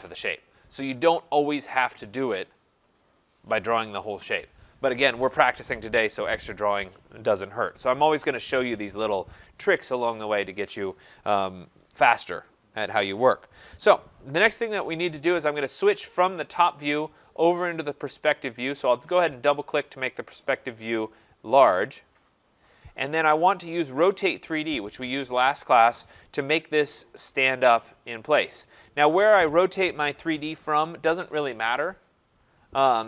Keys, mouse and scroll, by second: 1.6 Escape, 1.7 Escape, 2.8 click, 4.1 Delete, 17.9 click, 18.1 click, 19.6-21.1 scroll, 21.8 right click, 22.1-23.1 scroll, 23.9 click, 28.6 click.